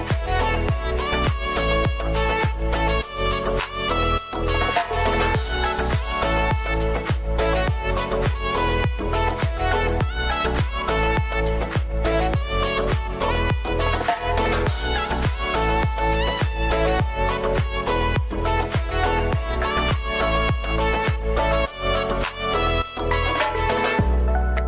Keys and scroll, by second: 5.9 ctrl+space, 17.6 ctrl+c, 17.8 ctrl+v, 18.7 ctrl+t.